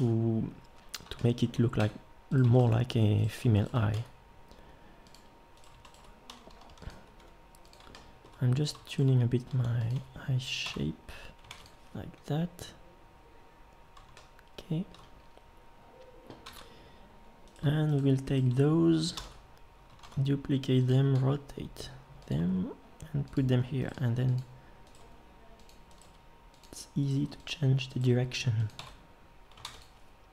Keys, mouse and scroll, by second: 1.8 Tab, 3.9 g, 6.5 r, 7.2 g, 9.5 r, 9.9 g, 10.6 Tab, 11.5 ctrl+s, 16.4 Tab, 19.2 ctrl+l, 20.0 shift+d, 21.2 r, 22.4 g, 23.9 g, 25.0 g, 26.0 g, 28.0 g, 28.8 Tab, 29.6 ctrl+s.